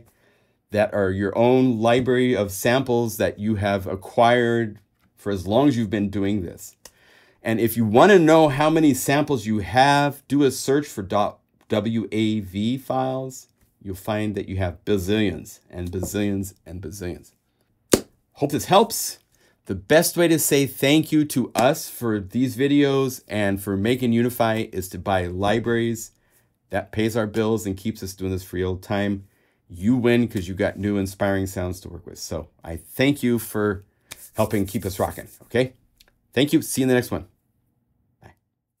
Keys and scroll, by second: 19.4 super+v.